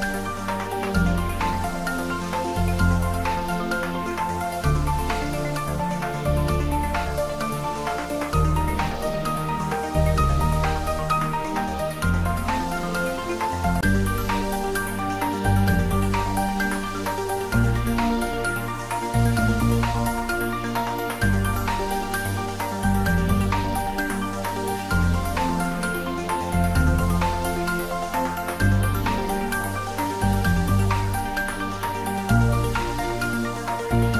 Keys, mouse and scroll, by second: 2.0 scroll up 1, 3.4-6.6 drag, 7.2 click, 8.0 shift+right click, 9.1 shift+a, 13.2 click, 16.2 s, 17.9 click, 18.9 3, 20.0 scroll down 1, 21.1 middle click, 21.8-22.3 scroll down 1, 22.3 middle click, 23.2 s, 25.2 click, 25.2-27.0 typing, 26.7 click, 27.6 click, 27.9-29.5 middle drag, 29.5 g, 29.8 x, 30.9 click, 31.8 `, 32.1 3, 33.1 scroll down 1, 33.6-34.1 middle drag.